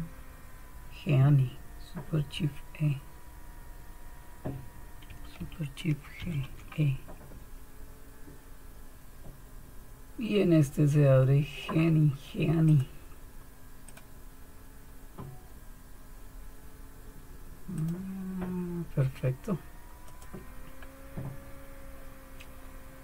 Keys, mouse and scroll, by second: 6.2 super+e, 12.7 click, 13.9 click, 17.7 click, 18.0-19.2 drag, 20.0-21.2 drag, 21.2-23.0 scroll up 1.